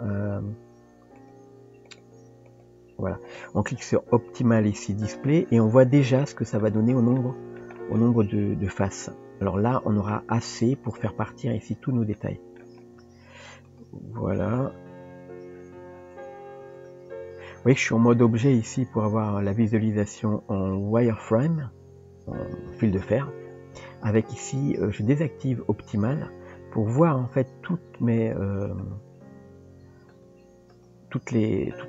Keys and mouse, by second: 1.2 click, 1.9 click, 2.5 click, 5.2 click, 5.6 click, 6.2-6.6 middle drag, 7.2-7.6 shift+middle drag, 7.8 middle click, 8.8-10.1 middle drag, 12.2-12.6 shift+middle drag, 13.7 drag, 14.5 click, 16.2 Tab, 18.5 Tab, 19.4-23.6 drag, 25.3 click, 26.1 click, 27.0-27.7 middle drag, 28.2 click, 28.8 click, 30.1 click, 31.7-31.8 middle drag.